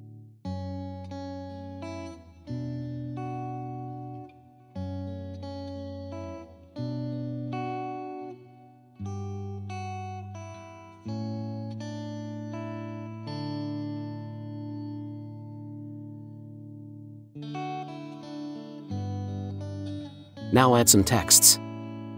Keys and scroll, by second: 6.1 ctrl+t, 8.0 Return, 9.1 ctrl+t, 10.7 Return, 16.4 ctrl+g, 17.4 ctrl+g.